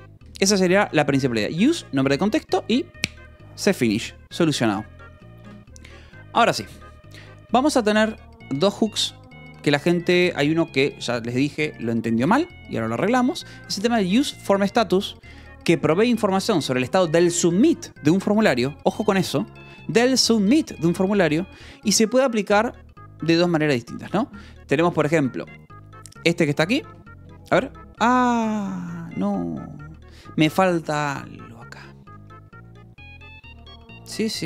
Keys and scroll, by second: 0.2 Escape, 5.9 shift+v, 13.9 shift+j, 15.2 Escape, 15.3 shift+j, 16.2 shift+v, 18.4 Escape, 19.9 j, 20.5 k, 24.4 shift+v, 26.8 Escape, 27.0 j, 28.7 k, 29.3 j, 31.7 k, 32.4 j.